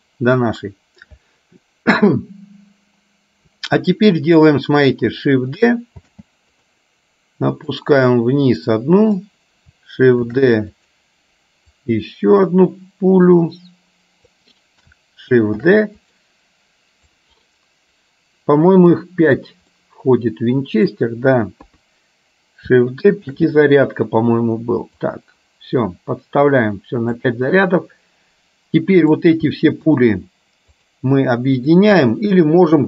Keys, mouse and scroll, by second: 6.2 shift+d, 7.9-9.3 drag, 10.4 shift+d, 11.9-14.6 drag, 15.7 shift+d, 17.2-19.6 drag, 19.8-20.9 middle drag, 21.7 KP_3, 23.4 shift+d, 25.2-27.3 drag, 30.9 shift+click.